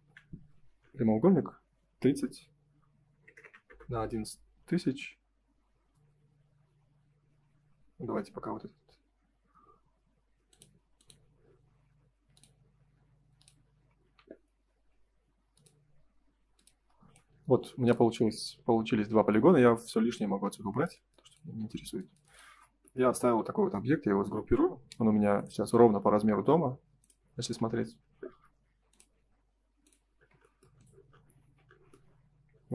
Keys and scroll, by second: 0.0 Return, 3.6 Return, 11.6 Escape, 16.8 space, 21.6 space, 27.4 space, 28.2 m, 30.1 space, 31.3 ctrl+s.